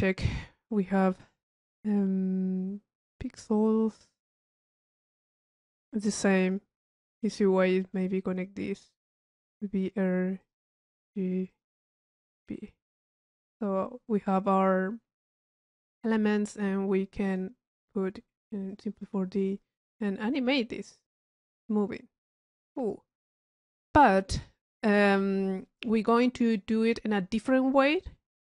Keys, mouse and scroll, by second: 3.1 middle click, 4.1 middle click, 5.7 middle click, 6.4 click, 9.2 click, 9.8 click, 11.0 click, 11.5 click, 12.2 click, 13.7 middle click, 13.7-14.2 scroll up 1, 14.2 click, 16.0 click, 17.2 click, 18.7 click, 19.4 click, 20.1-23.9 drag, 25.6 click, 26.8 click, 28.0-28.3 drag.